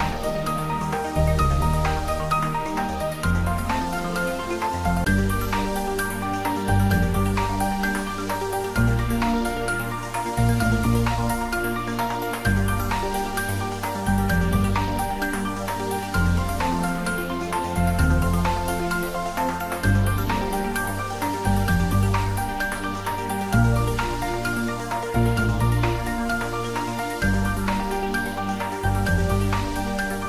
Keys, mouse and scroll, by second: 4.4 click, 5.2 3, 6.9 g, 7.4 x, 8.1 y, 11.1 click, 11.4 scroll down 1, 12.2 middle click, 13.4-13.7 scroll up 1, 14.3-15.9 middle drag, 15.9 g, 16.1 y, 19.5 BackSpace, 20.6 click, 21.0-21.3 scroll down 1, 21.3 middle click, 22.5-23.3 scroll down 1, 23.3 middle click, 24.3-25.2 scroll down 1, 25.2-25.9 scroll up 1, 26.6 ctrl+r.